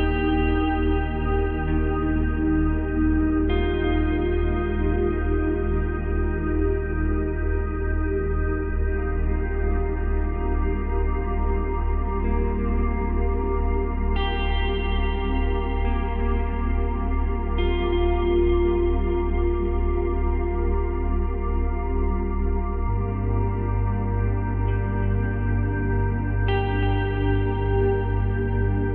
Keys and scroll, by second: 27.9 space.